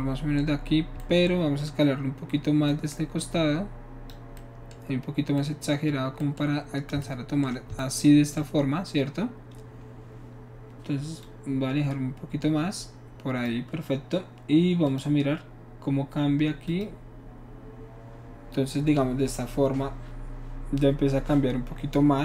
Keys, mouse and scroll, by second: 2.7-4.1 drag, 11.3-13.5 drag, 14.9 click, 16.7 click.